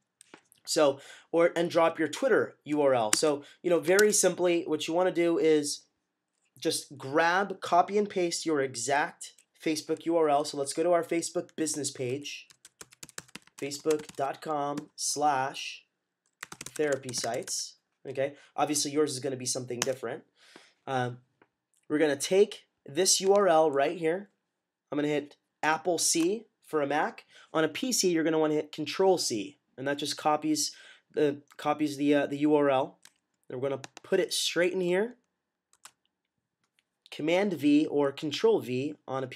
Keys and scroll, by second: 3.0 Tab, 3.9 Tab, 11.8-17.9 typing, 25.9 c, 35.7 v.